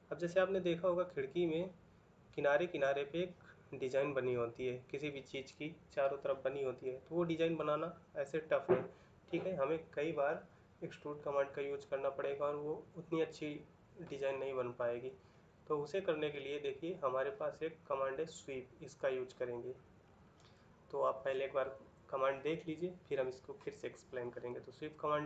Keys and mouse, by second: 14.4 middle click.